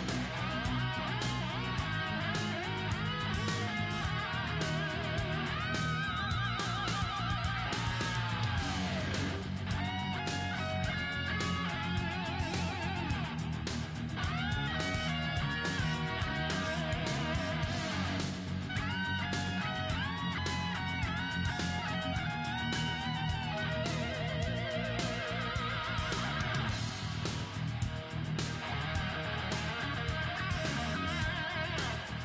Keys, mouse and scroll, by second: 1.0 g, 2.1-13.0 middle drag, 4.4-6.2 right drag, 4.9 g, 7.1-9.4 right drag, 8.2 g, 10.1-13.6 right drag, 12.0 g, 13.6-17.4 middle drag, 14.1-19.8 right drag, 14.3 g, 18.4 g, 19.8 middle click, 20.3-22.1 right drag, 20.5 g, 21.5-23.7 middle drag, 22.6-24.7 right drag.